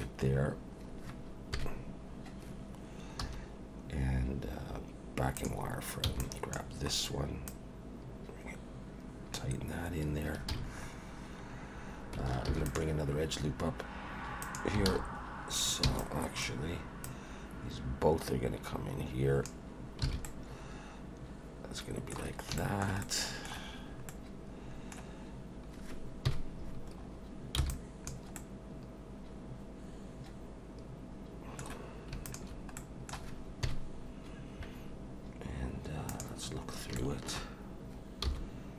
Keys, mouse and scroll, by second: 0.3 scroll down 1, 1.6 KP_1, 3.2 1, 5.4 click, 6.0 b, 6.8 scroll up 2, 7.5 click, 9.9 scroll down 2, 10.5 alt+a, 10.7-11.3 scroll up 3, 11.3-12.1 scroll down 2, 12.5 ctrl+r, 14.9 alt+a, 15.3 scroll up 1, 15.8 b, 17.0 click, 20.0 alt+a, 20.2 middle click, 22.6 shift+middle click, 23.0 middle click, 24.1 middle click, 24.3 shift+middle click, 26.3 KP_1, 27.0 scroll up 2, 27.6 b, 28.4 middle click, 32.2 shift+click, 32.8 middle click, 33.6 KP_1, 36.1 click, 36.7 scroll up 1, 36.9 shift+middle click, 38.2 g.